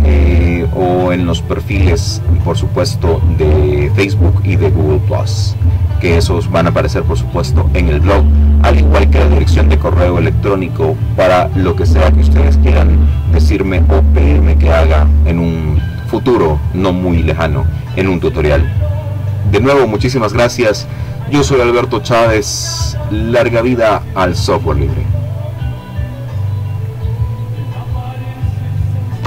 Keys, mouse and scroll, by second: 21.7 click, 23.7 click, 24.8-29.2 drag.